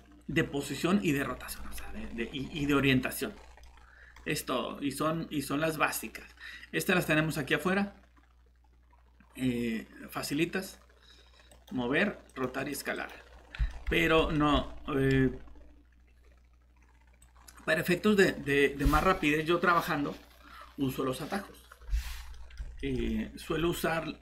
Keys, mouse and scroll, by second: 1.6 middle click, 3.3 scroll down 1, 3.6 scroll up 1, 11.5 click, 13.7 middle click, 17.2 click, 22.3 middle click.